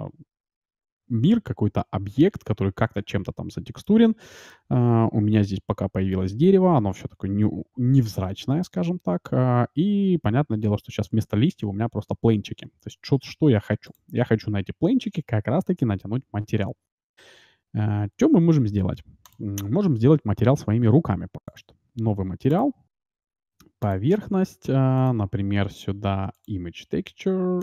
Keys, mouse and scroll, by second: 0.9-2.5 drag, 3.5-5.7 middle drag, 12.0 shift+z, 13.9-16.3 drag, 19.2-27.6 drag.